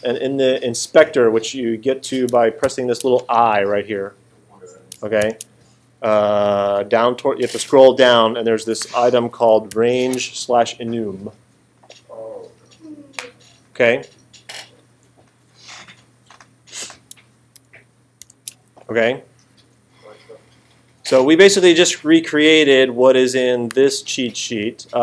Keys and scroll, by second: 2.6 alt+super+8, 5.2 alt+super+8, 9.7 alt+super+8, 18.2 alt+super+8.